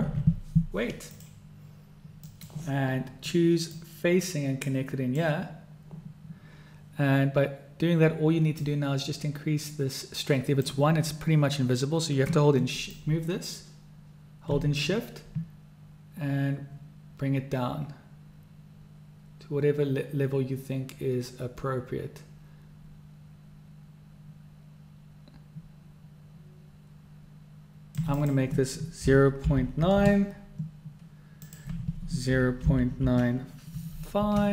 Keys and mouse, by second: 4.0-5.5 drag, 8.8-10.9 drag, 13.1-28.2 drag, 28.5-34.5 drag.